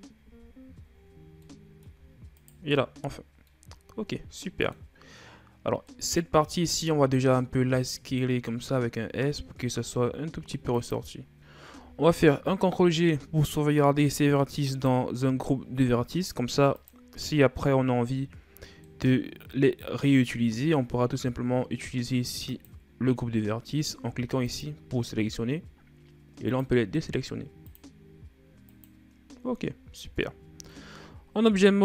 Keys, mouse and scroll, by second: 0.0 n, 1.2 middle click, 2.1 shift+right click, 2.7-3.3 scroll down 2, 3.3-6.7 middle drag, 6.7 s, 12.4 ctrl+g, 16.6 click, 18.6-21.7 middle drag, 22.3-29.8 drag, 29.8 Tab, 30.5-31.8 middle drag.